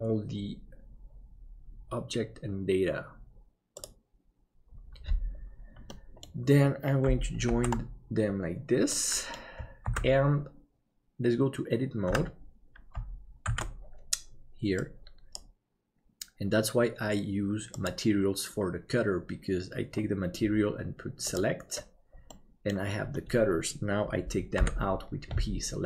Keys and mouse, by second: 5.9 middle click, 7.7 ctrl+j, 8.9 middle click, 11.7 ctrl+s, 12.3 Tab, 13.5 alt+a, 15.0-16.5 drag, 21.2 click, 22.3 middle click, 24.5 p.